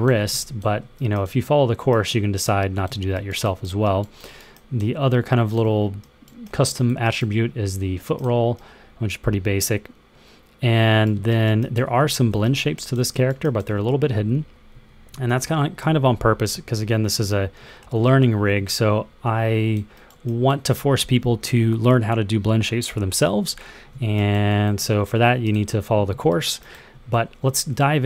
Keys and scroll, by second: 0.0 super+z, 11.8 super+z, 13.8 super+z, 14.3 super+z, 14.6 super+z, 15.0 super+z, 15.3 super+z, 15.7 super+z, 16.0 super+z, 16.4-17.0 super+z, 17.1 super+z, 17.5 super+z, 17.8-20.3 super+z.